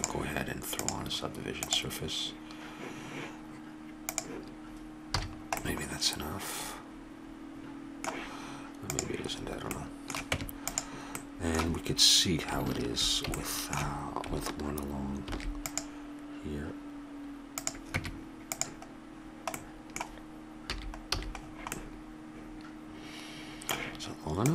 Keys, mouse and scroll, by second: 0.8-2.8 drag, 4.0-5.6 drag, 5.2 a, 5.6-6.7 middle drag, 8.9-11.5 drag, 10.3 Tab, 15.3 ctrl+r, 18.0 Tab, 20.7 a, 21.1 a, 22.5 middle click, 23.6 middle click.